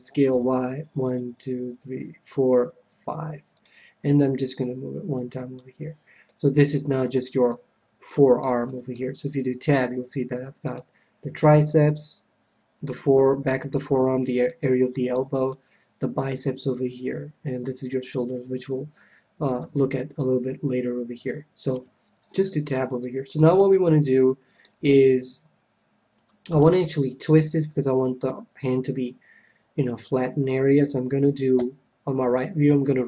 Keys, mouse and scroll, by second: 3.6-6.3 drag, 6.3-9.1 middle drag, 9.1 Tab, 9.2-11.4 middle drag, 12.9-17.0 middle drag, 19.5 KP_1, 21.7 Tab, 22.2-25.7 middle drag, 31.5 KP_3.